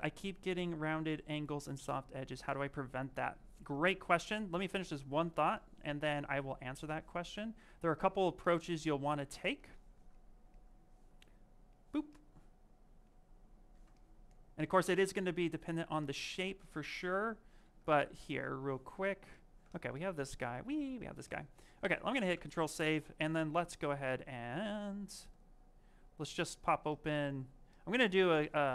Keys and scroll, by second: 9.1 w, 17.5 shift+f.